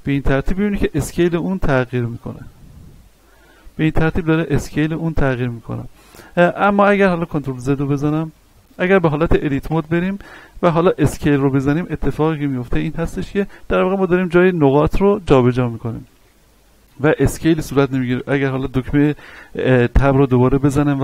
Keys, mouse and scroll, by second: 1.7 s, 2.1 x, 3.6 click, 6.2 Tab, 7.2 ctrl+z, 8.4-9.6 scroll up 1, 9.6 Tab, 11.0 s, 15.7 click, 17.5 Tab.